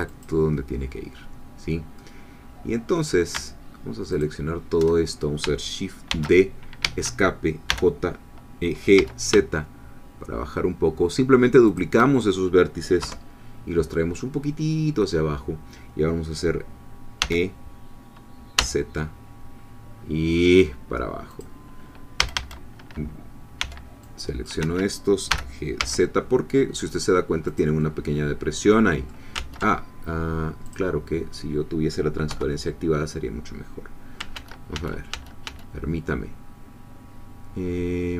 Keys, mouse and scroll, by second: 0.1-2.0 drag, 2.0-3.1 middle drag, 4.1 alt+shift+click, 6.1 shift+d, 6.8 Escape, 7.7 g, 9.0 z, 11.7 shift+click, 13.0 3, 17.2 e, 18.6 z, 21.3 click, 22.2 a, 23.6 c, 24.0-25.3 drag, 24.6 Escape, 25.8 z, 27.5 click, 27.8-29.3 middle drag, 29.3 ctrl+z, 30.7 click, 32.3 3, 34.3 ctrl+z.